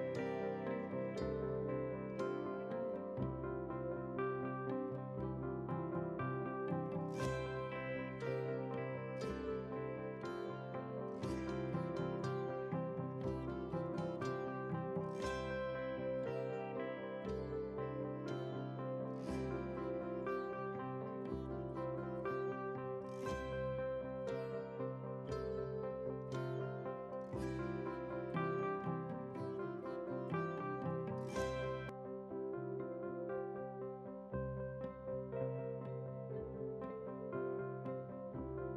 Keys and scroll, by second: 0.3 ctrl+t, 27.6 ctrl+w, 30.9 ctrl+w, 31.8 ctrl+w, 34.1 ctrl+a, 35.6 ctrl+c, 36.7 ctrl+c.